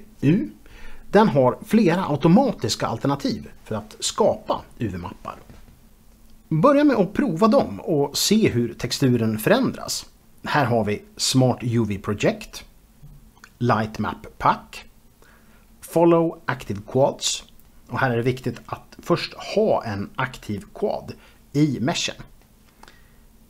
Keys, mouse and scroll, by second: 1.0 space, 1.2 scroll down 1, 1.6-4.7 shift+middle drag, 5.6 u, 7.0 a, 10.2 u, 11.5 click, 12.3 click, 13.3 ctrl+z, 13.7 u, 14.2 click, 14.8 Return, 15.5 u, 16.4 click, 17.4 click, 21.3 shift+click, 21.4 shift+double click, 22.0 u, 22.2 click, 22.5 click.